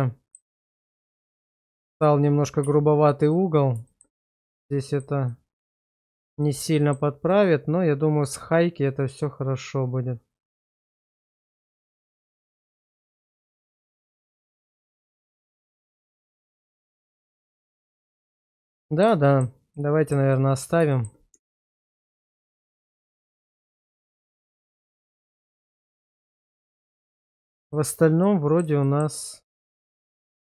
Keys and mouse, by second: 2.7 q, 3.9 shift+middle click, 4.2 Tab, 4.8 shift+middle drag, 5.3-5.9 middle drag, 6.4 shift+middle click, 6.8 shift+middle click, 7.3-13.1 middle drag, 13.4 shift+middle click, 13.8-17.8 middle drag, 18.1 shift+middle drag, 18.8 middle click, 19.3 shift+middle click, 19.7 shift+middle click, 20.3 middle click, 20.9 shift+middle click, 21.3 Tab, 22.2 shift+middle click, 22.6-25.2 middle drag, 25.4 shift+middle click, 25.9-27.0 middle drag, 27.7 shift+middle click, 28.2 middle click, 28.8 shift+middle click, 29.8 Tab.